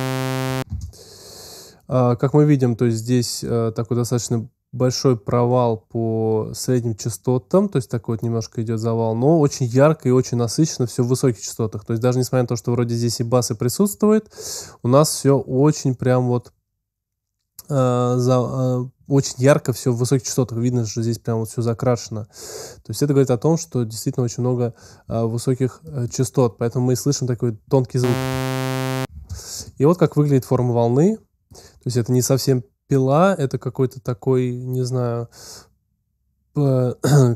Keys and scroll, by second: 0.5 space, 28.0 space.